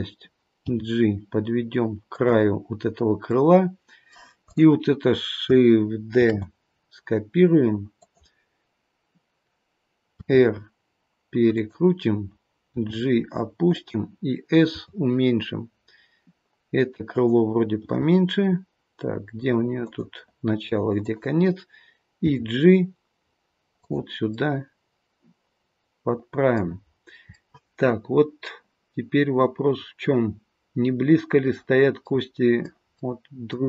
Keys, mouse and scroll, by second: 0.6 g, 3.3 middle click, 4.5 click, 6.1 shift+d, 12.7 g, 14.6 s, 20.9 click, 22.2 g, 24.3 middle click, 26.9-28.1 scroll up 2, 27.3 middle click, 32.1 middle click, 32.9 middle click.